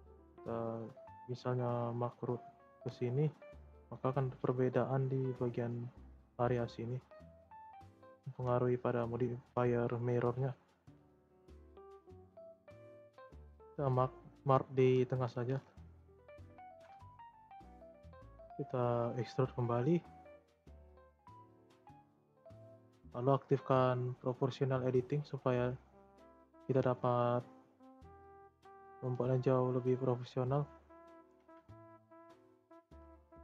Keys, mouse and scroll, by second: 1.7 scroll down 2, 2.7 click, 3.6 middle click, 4.3 shift+scroll up 3, 5.1-6.6 middle drag, 6.6 scroll down 2, 6.9-7.9 middle drag, 7.9 click, 8.3 shift+middle click, 8.8-11.9 scroll up 2, 12.2-13.2 scroll up 2, 13.2 click, 13.9-15.0 shift+middle drag, 15.0 scroll down 4, 15.2-16.6 middle drag, 16.6 e, 20.4 e, 22.8-26.6 drag, 26.6 ctrl+a, 31.8 shift+middle click, 32.3 click, 32.8 ctrl+a.